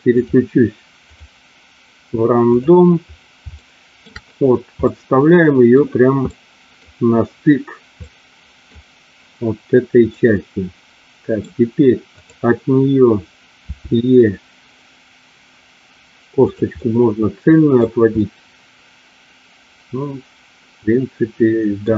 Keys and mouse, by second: 0.9-2.8 drag, 3.5 shift+middle click, 4.8 middle click, 6.2 middle click, 7.9 middle click, 10.2-11.3 middle drag, 13.6 e, 16.8 middle click, 18.3-21.8 middle drag.